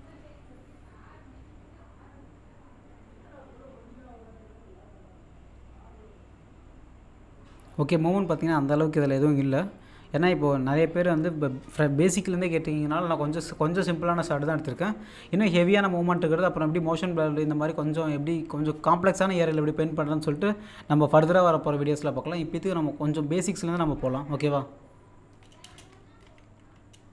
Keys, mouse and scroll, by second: 25.7 click, 26.2 space, 26.2 F2.